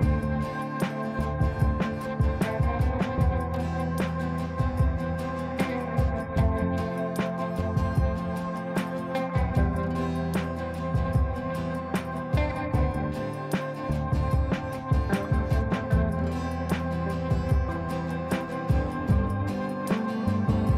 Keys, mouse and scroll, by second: 0.4 click, 3.1 F3, 3.6 F2, 3.8 click, 5.7-10.8 drag, 13.9 click, 14.7 ctrl+right click, 15.8 click, 16.5 ctrl+a, 18.5 shift+n, 20.0-20.7 typing.